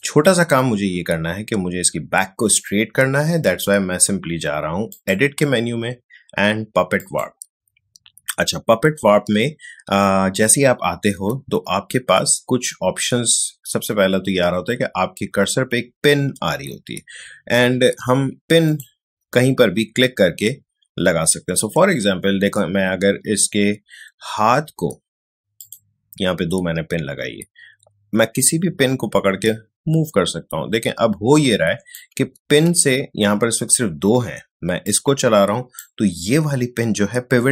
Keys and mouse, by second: 4.9 click, 18.6 click, 28.3-32.4 drag, 32.4 ctrl+z, 35.1-37.5 drag.